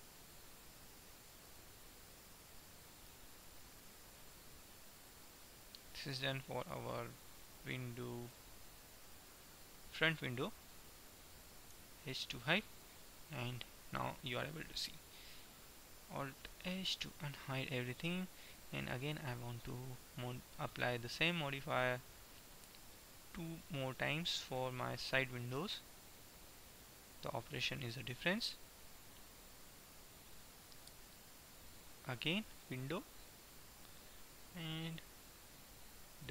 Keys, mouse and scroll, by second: 1.6-3.3 right drag, 3.3 middle click, 4.9-6.8 drag, 7.6 click, 8.4 right click, 9.3-11.3 middle drag, 11.8 h, 12.4-14.3 middle drag, 16.6 alt+h, 19.3-20.9 right drag, 21.8-23.6 drag, 24.3-26.4 drag, 27.3-28.9 drag, 28.9 middle click, 32.8-34.9 middle drag.